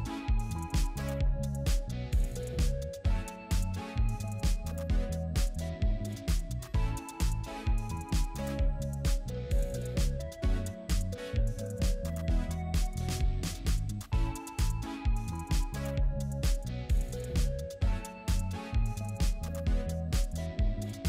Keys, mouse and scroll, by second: 0.0-1.6 scroll up 1, 5.3 right click, 15.7-19.0 scroll up 1, 19.8-21.0 scroll up 1.